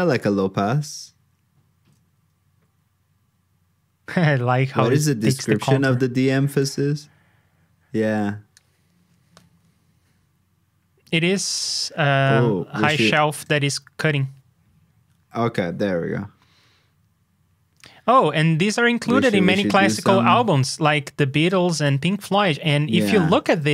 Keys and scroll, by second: 6.6 super+Tab, 23.5 super+Tab.